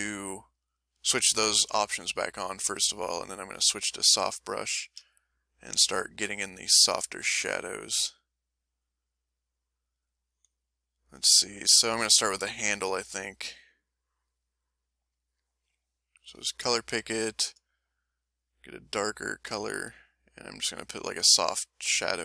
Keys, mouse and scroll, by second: 0.5 click, 1.5 click, 2.5 click, 3.0 click, 3.6 click, 4.6-10.4 shift+middle drag, 12.9 click, 13.5 click, 16.3 s, 17.8 click, 18.8-19.9 drag, 20.3 middle click.